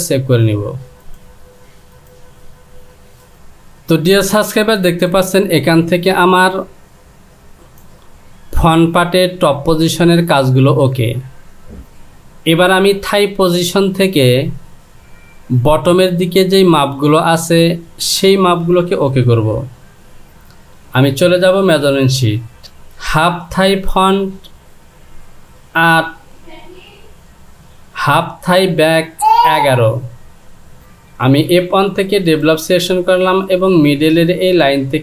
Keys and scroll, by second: 19.6 Delete.